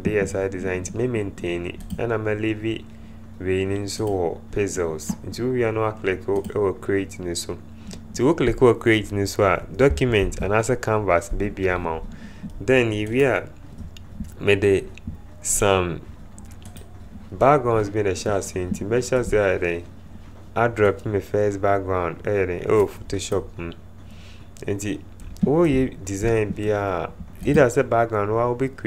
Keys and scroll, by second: 10.6 ctrl+0.